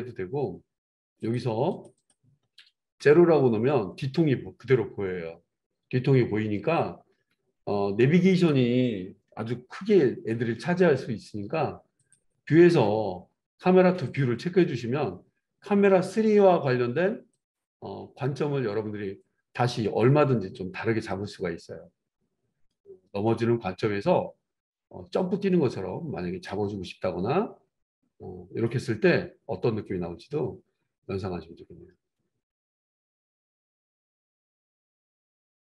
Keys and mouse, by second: 1.3 middle click, 1.7 click, 1.9-17.3 middle drag, 2.9 KP_0, 8.2 click, 9.8 n, 14.0 click, 17.3 click, 17.6-30.0 middle drag, 17.8 n, 29.8-35.6 drag.